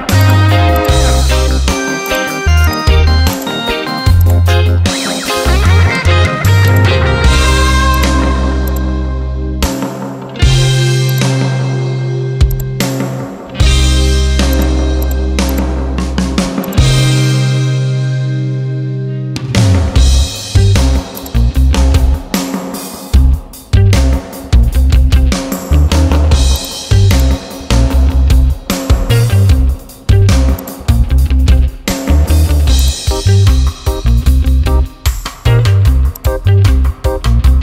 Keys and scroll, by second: 24.3 ctrl+e.